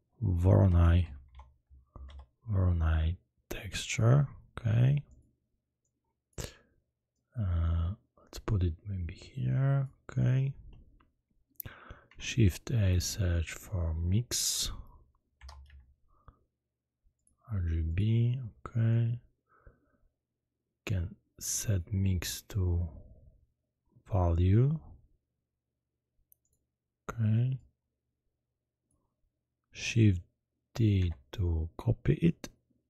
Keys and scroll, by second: 0.6-2.0 typing, 12.0 shift+a, 15.4 i, 15.6 x, 30.9 shift+d.